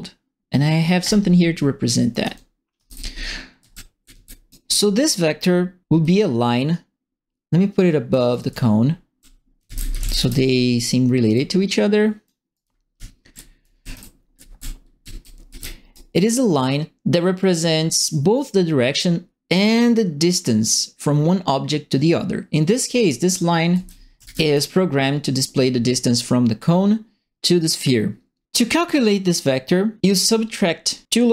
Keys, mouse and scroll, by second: 1.0 click, 1.9-4.6 typing, 2.1-4.5 right drag, 6.0 right click, 6.8-8.1 drag, 8.1-10.6 typing, 8.3-10.3 right drag, 11.3 right click, 12.5-15.9 right drag, 12.6-16.0 typing, 23.2-24.5 right drag, 23.4-24.7 typing.